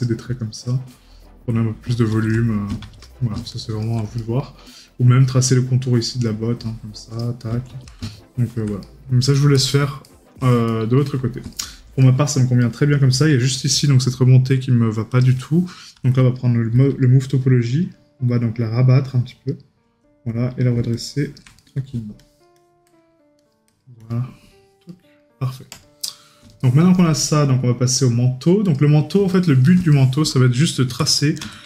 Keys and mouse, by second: 4.2 right click, 8.9 right click, 21.6 right click, 24.9 right click, 26.7 right click, 29.4 right click.